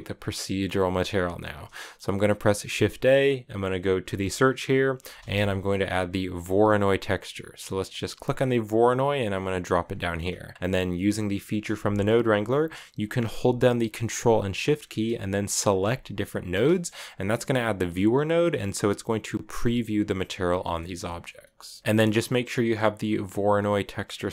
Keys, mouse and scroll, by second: 0.2 middle click, 0.8-1.5 scroll down 1, 1.5 middle click, 2.4 shift+a, 9.7 middle click, 10.0 scroll up 1, 10.3 click, 10.7-13.8 middle drag, 15.6 ctrl+shift+click, 16.4-22.0 middle drag, 21.4 scroll up 1, 22.0-23.8 drag, 23.8 scroll up 1, 23.9 middle click, 24.1 scroll down 2.